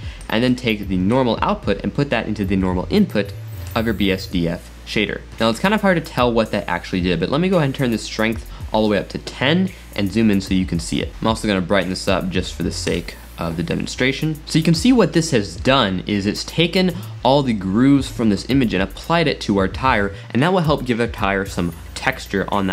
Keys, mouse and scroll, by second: 0.2 click, 1.1-4.1 drag, 4.2-5.5 middle drag, 7.8 click, 10.0-10.4 scroll up 2, 11.1 middle click, 11.4 click, 16.6-19.4 middle drag.